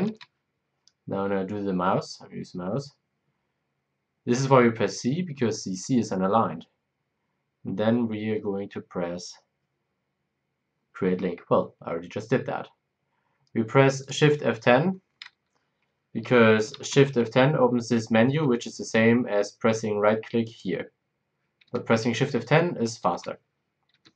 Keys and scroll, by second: 0.0 shift+F10, 16.7 shift+F10, 18.3 Escape, 21.6 Escape, 23.0 shift+F10, 23.9 Escape.